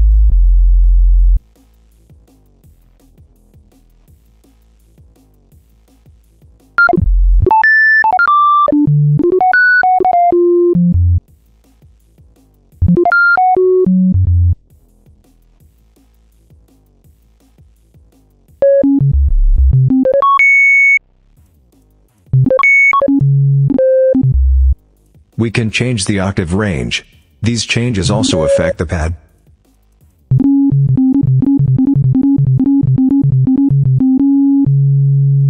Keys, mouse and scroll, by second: 3.4 click, 4.8 click, 5.7 click, 6.6-11.1 drag, 11.5 click, 12.6-14.5 drag, 15.2 click, 15.6 click, 16.1 click, 16.8 click, 17.2 click, 17.6 click, 18.4-20.9 drag, 21.5 click, 22.1-24.7 drag, 25.2-26.1 drag, 26.5-27.5 drag, 27.8-28.7 drag, 29.2-29.9 drag, 30.1-35.4 drag.